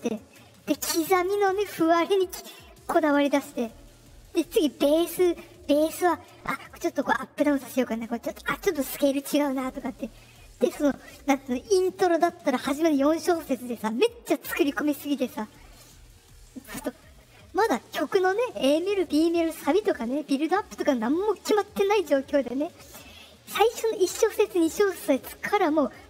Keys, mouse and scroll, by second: 16.7 middle click.